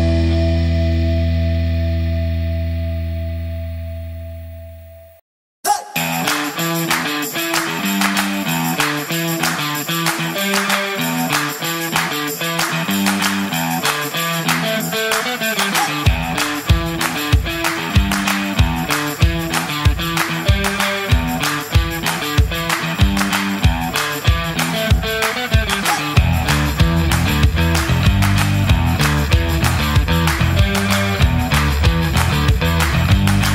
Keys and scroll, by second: 9.9 space, 12.5-18.2 typing, 23.4 BackSpace.